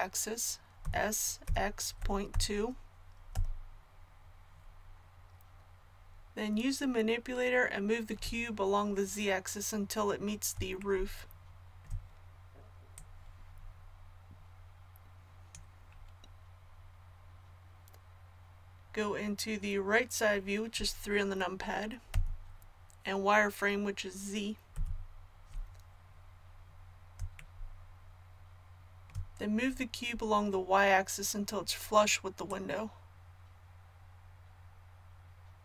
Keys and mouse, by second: 0.8 s, 12.9-21.3 drag, 22.1 KP_3, 24.7 z, 32.5-35.6 drag.